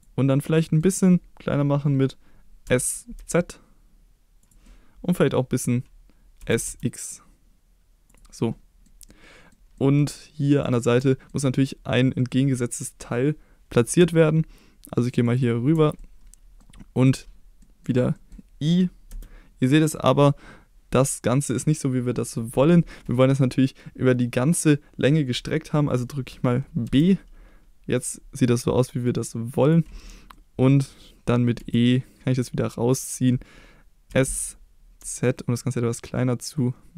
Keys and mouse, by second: 0.3 middle click, 2.7 s, 3.2 z, 4.4 click, 4.7 middle click, 6.4 s, 6.7 x, 8.1 click, 8.4 middle click, 9.1 middle click, 10.6 click, 11.1 shift+middle click, 15.3 ctrl+click, 16.0 middle click, 17.6 middle click, 18.2 middle click, 19.1 i, 26.9 b, 29.6 click, 30.4 middle click, 31.6 e, 32.9 click, 34.1 s, 35.0 z.